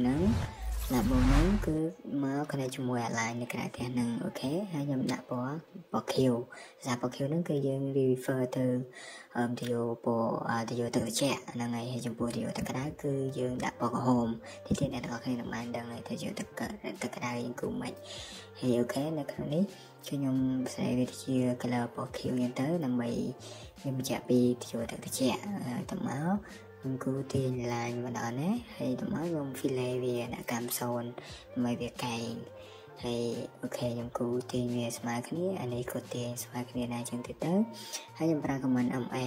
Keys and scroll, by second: 2.4 Escape, 4.9 Escape, 6.8 typing, 8.2 typing, 11.2 Escape, 12.2-12.7 typing, 16.4 Escape, 16.7 Escape, 19.7 Escape, 21.0 Escape, 26.1 Escape, 26.3 Escape, 26.8 f, 27.0 space, 29.0 Escape, 35.6 Escape, 35.7-36.6 typing, 37.9 Escape, 38.8 Escape, 39.0 Escape.